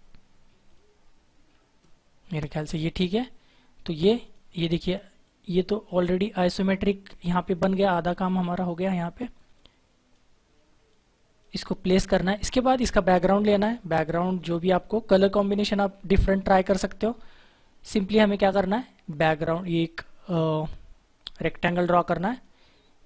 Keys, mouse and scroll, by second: 0.6 click, 0.9-1.4 scroll up 1, 1.4-1.8 scroll down 1, 3.0 click, 8.0 click, 17.9 click.